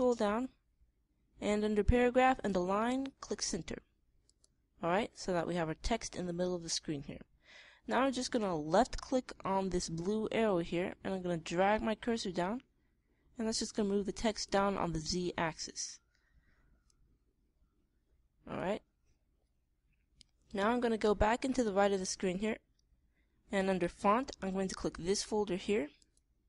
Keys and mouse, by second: 4.7-6.5 middle drag, 11.8 middle click, 12.2-13.7 drag, 15.8-17.3 middle drag, 17.3-19.1 drag, 26.4 click.